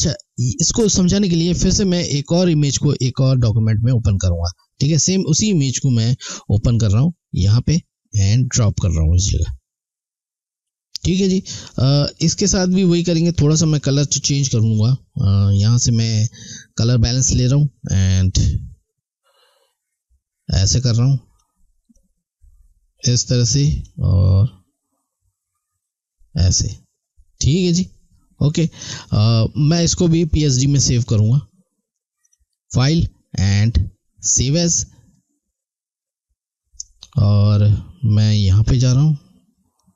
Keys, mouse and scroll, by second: 1.7 click, 4.5 click, 11.5 click, 32.2 click, 38.4 click.